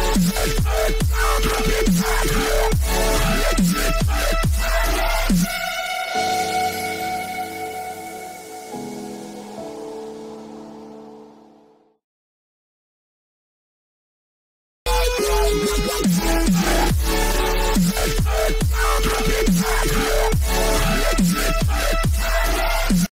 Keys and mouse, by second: 0.0 click, 1.2-2.7 middle drag, 3.8 b, 8.4 a, 8.8 a, 10.2 z, 13.9 b, 22.1-23.1 drag.